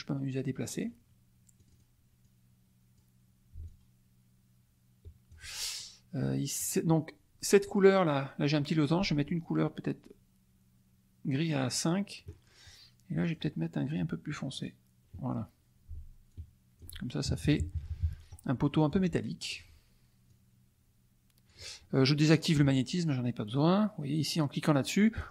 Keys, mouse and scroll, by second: 1.7 click, 2.2 click, 3.7-5.5 ctrl+drag, 5.7 ctrl+click, 7.7 click, 11.8 click, 13.2 click, 14.5 click, 16.2 ctrl+click, 17.2 ctrl+KP_Subtract, 18.6 middle click, 19.5 click, 20.2-21.6 drag, 22.4 click.